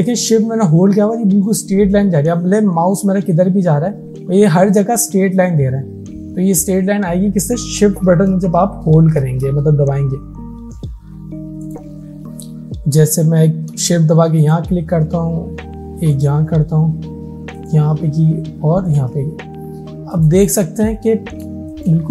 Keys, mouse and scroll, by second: 13.6 shift+Num_Lock, 14.4 shift+click, 20.9-21.2 alt+scroll up 1, 21.6 space, 21.8 click.